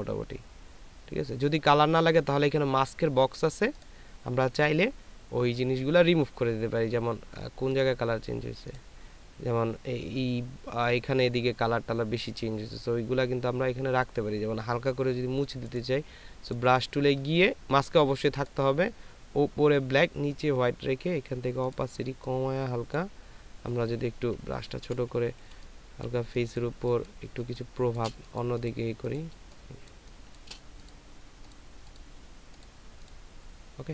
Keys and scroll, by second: 25.3 [, 25.3 [, 25.4 [, 27.4 space.